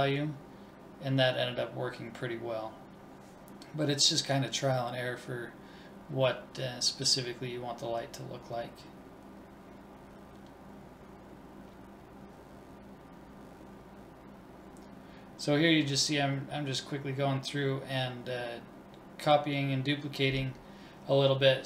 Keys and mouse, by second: 3.4 click, 4.1-4.6 drag, 4.8 l, 5.6 click, 6.3 middle click, 7.0 right click, 7.4 shift+d, 8.0 click, 8.3 BackSpace, 9.9 click, 12.5 right click, 13.4 shift+d, 14.2 click, 14.6 BackSpace, 15.7 click, 17.3-18.3 right drag, 18.3 click.